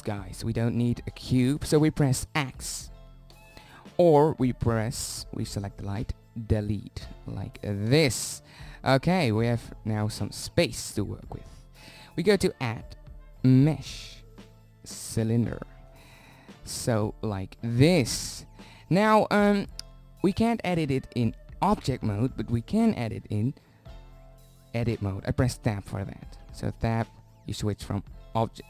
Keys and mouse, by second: 3.9 x, 8.2 Delete, 12.9 click, 17.3-18.7 middle drag, 18.7-19.0 drag, 19.0-20.2 middle drag, 22.1-24.9 middle drag, 25.4 Tab, 27.7 Tab, 28.0 Tab, 28.4 Tab.